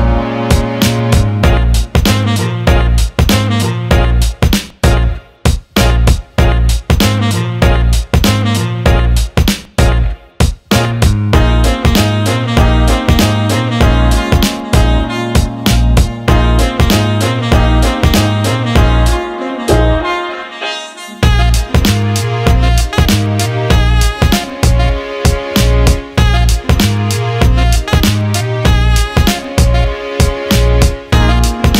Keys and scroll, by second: 3.4-4.2 typing, 26.0-27.8 typing.